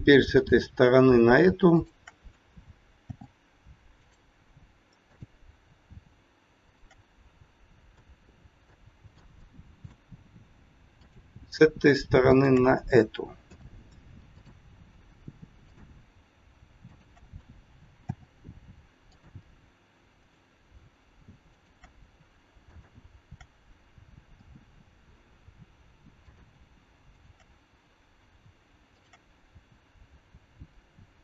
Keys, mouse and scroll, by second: 0.3 click, 1.7 shift+click, 3.0 f, 4.0 click, 5.1 click, 6.6 shift+click, 6.7 shift+click, 7.8 f, 8.7 middle click, 9.4 shift+middle click, 11.0 click, 12.2 shift+click, 13.5 f, 14.2 click, 15.5 click, 16.8 shift+click, 16.9 shift+click, 18.0 f, 19.0 click, 20.1 click, 21.5 shift+click, 21.9 shift+click, 22.6 click, 24.3 f, 26.1 click, 27.1 shift+click, 29.0 click, 31.1 click.